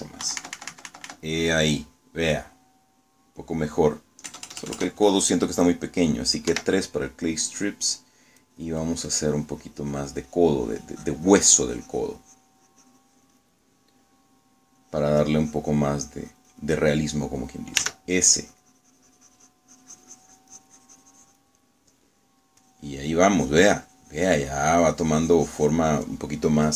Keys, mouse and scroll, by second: 1.3 KP_Subtract, 2.6 click, 2.7 middle click, 2.8-4.7 drag, 5.4 KP_Add, 7.6 3, 9.5-14.7 drag, 15.9-18.3 drag, 18.9 s, 19.4-22.6 drag, 23.7-26.7 drag.